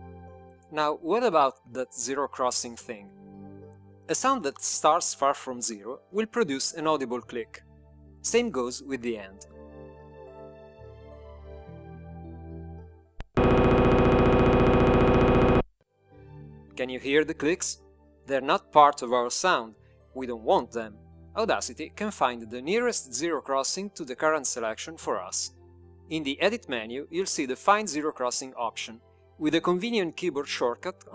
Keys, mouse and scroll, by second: 12.6 shift+click, 15.6 click, 29.4 click.